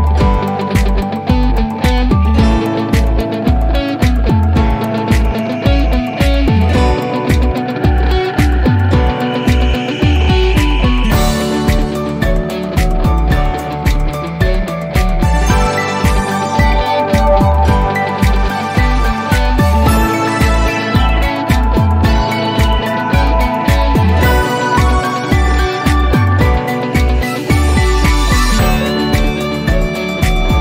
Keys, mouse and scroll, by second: 17.7-21.8 drag.